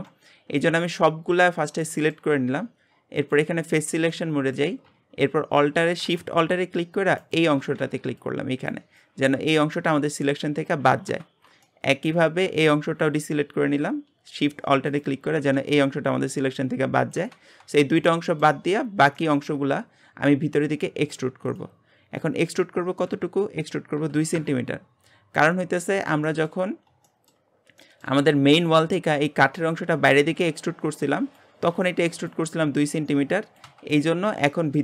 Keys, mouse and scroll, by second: 1.8-3.1 shift+middle drag, 3.1 click, 3.7-4.1 scroll up 1, 4.1-7.2 shift+middle drag, 7.2 alt+shift+click, 11.6 shift+middle click, 12.2-14.9 scroll up 1, 14.9 alt+shift+click, 17.5-18.0 scroll down 2, 18.0 shift+middle click, 18.8-19.1 scroll up 1, 19.1 shift+middle click, 19.6-20.3 scroll up 1, 20.3 e, 22.5-25.4 drag, 25.4-26.7 middle drag, 26.7-27.1 scroll up 1, 27.1 shift+middle click, 27.5 scroll up 1, 27.8-33.9 shift+middle drag, 33.9-34.8 middle drag.